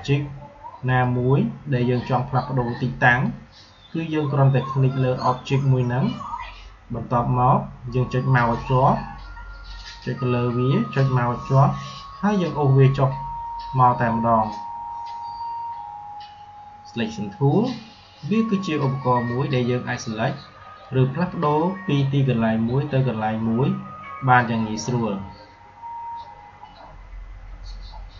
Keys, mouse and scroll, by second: 9.9-17.6 drag, 20.7-26.8 drag, 28.1 click.